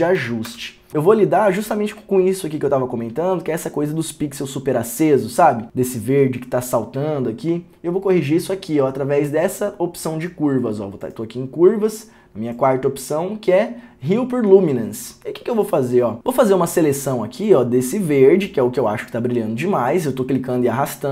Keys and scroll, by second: 0.0-0.6 typing.